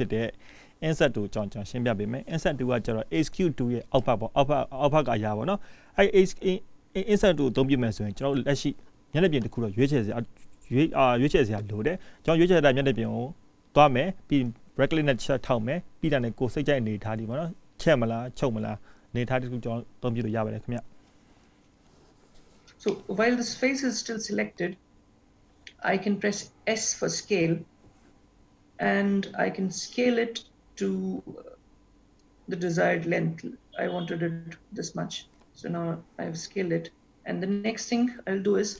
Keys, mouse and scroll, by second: 3.0-5.9 scroll up 1, 6.0-6.8 scroll up 2, 6.9 shift+middle click, 8.0-8.6 scroll up 1, 8.6-9.2 scroll up 1, 12.7 middle click, 22.9 middle click, 35.3-38.7 scroll down 3.